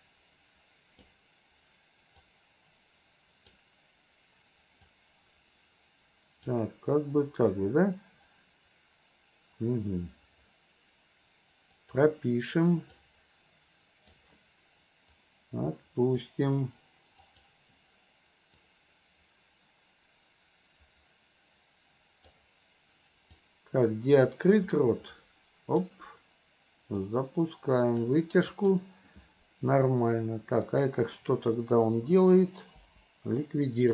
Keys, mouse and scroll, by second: 0.1-1.1 drag, 2.3-3.6 drag, 4.9-6.6 drag, 11.9 click, 13.1-14.3 drag, 15.2-16.4 drag, 17.3 click, 18.8-22.5 drag, 23.5-26.0 drag, 27.1 click, 28.6 click, 30.7 click, 32.9 Delete.